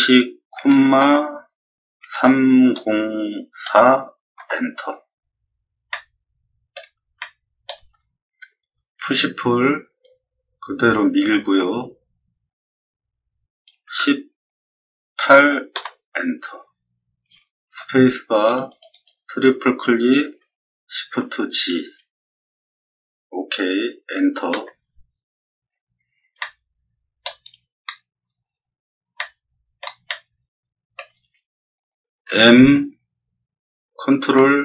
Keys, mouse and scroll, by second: 0.5 ., 2.0 3, 2.7 0, 3.6 4, 4.3 Return, 5.9 middle click, 7.1 shift+middle click, 10.0-13.6 drag, 13.8 1, 15.1 8, 15.7 Return, 18.4 click, 18.6 click, 18.9 click, 20.9 shift+g, 24.5 Return, 26.3 shift+middle click, 28.4 scroll down 2, 29.1 middle click, 30.0 shift+middle click, 32.2 m.